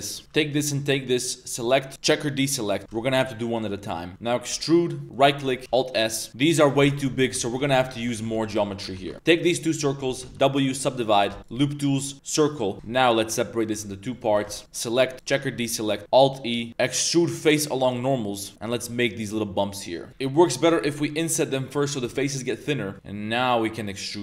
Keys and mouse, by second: 0.2 shift+3, 0.5 alt+shift+click, 1.5 click, 3.5 alt+shift+click, 4.5 e, 5.6 middle click, 5.8 alt+s, 6.3 Tab, 6.3 middle click, 6.6 middle click, 6.8 shift+middle drag, 7.1 middle click, 7.4 ctrl+z, 7.6 ctrl+z, 7.8 ctrl+z, 7.9 ctrl+z, 8.1 ctrl+z, 8.3 ctrl+z, 8.9 2, 9.1 click, 9.1 w, 10.2 w, 11.3 w, 12.7 ctrl+z, 12.7 Tab, 12.7 ctrl+r, 12.7 ctrl+b, 14.3 3, 14.5-15.3 alt+drag, 15.9 middle click, 16.0 alt+e, 20.6 i, 22.8 middle click, 22.9 shift+e.